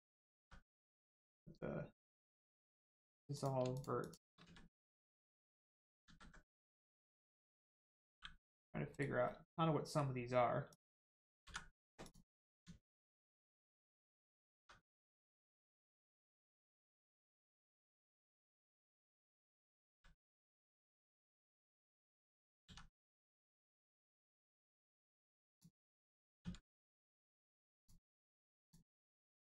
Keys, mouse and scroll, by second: 0.4 x, 3.3 click, 3.7 shift+click, 4.0 shift+click, 4.4 x, 5.0 click, 6.1 ctrl+z, 6.5 middle click, 8.1 g, 8.9 right click, 9.3 middle click, 10.7 click, 11.4 x, 12.0 click, 12.8 shift+middle click, 14.2 click, 14.6 x, 15.2 click, 16.8 shift+click, 17.2 shift+click, 17.6 x, 18.1 click, 18.7 middle click, 19.5 click, 19.9 x, 20.5 click, 22.6 x, 23.2 click, 23.6-23.9 scroll up 1, 24.1 shift+middle click, 25.5 click, 26.4 x, 27.7 click, 29.0 x.